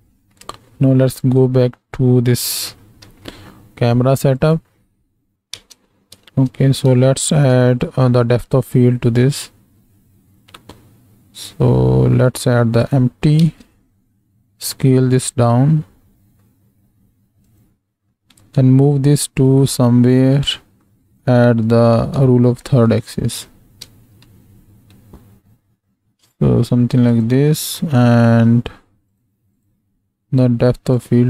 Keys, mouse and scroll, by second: 1.2 click, 3.1 alt+a, 4.3 click, 5.9 space, 8.9 shift+a, 13.4 ctrl+space, 15.0 s, 22.4 shift+middle drag, 23.9 ctrl+space, 27.1 click, 29.1 click, 29.6 drag, 30.9 click.